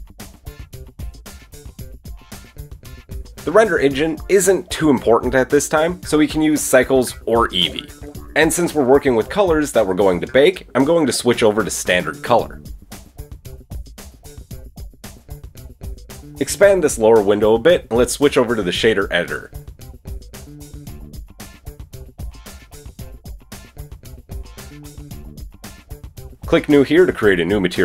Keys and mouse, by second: 7.5-20.2 drag, 21.5-22.7 drag, 23.3 click.